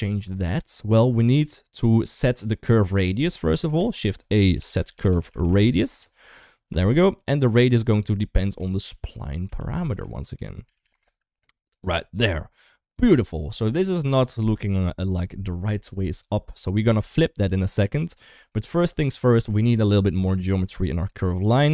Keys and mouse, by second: 1.1 click, 1.4-2.7 drag, 3.6 shift+a, 7.6-11.7 drag, 10.6 a, 13.0 click, 13.5 middle drag, 14.7 KP_1, 17.1-17.9 drag.